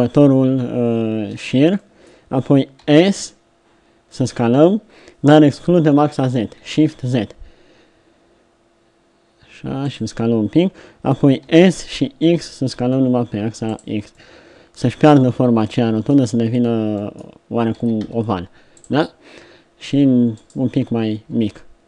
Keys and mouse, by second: 1.2-3.6 middle drag, 2.8 s, 11.5 s, 14.1 middle click, 14.9 z, 15.2 middle click, 17.7 s, 20.3 middle click.